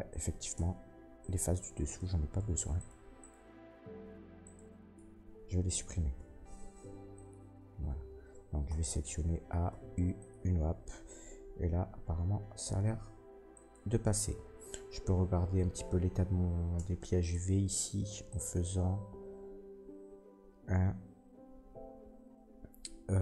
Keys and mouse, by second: 0.1 middle click, 0.2-1.2 drag, 0.5 Tab, 1.2 middle click, 1.3 shift+click, 1.8 shift+middle click, 1.9-13.7 shift+drag, 2.7 ctrl+middle click, 2.7 ctrl+right click, 3.1 ctrl+right click, 4.4 ctrl+right click, 6.1 Delete, 8.6 a, 9.6 u, 11.8 a, 12.8 s, 13.7-18.2 middle drag, 16.7 Tab, 17.2 Tab, 18.2-23.2 drag.